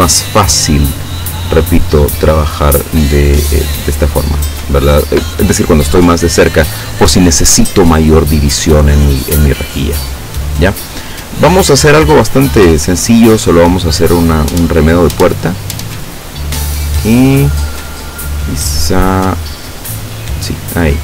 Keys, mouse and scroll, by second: 0.8-1.3 ctrl+scroll down 4, 1.8 ctrl+click, 3.1-3.8 ctrl+scroll down 4, 4.8 ctrl+scroll up 2, 12.2 click, 14.7 click, 16.5 click, 20.5 click.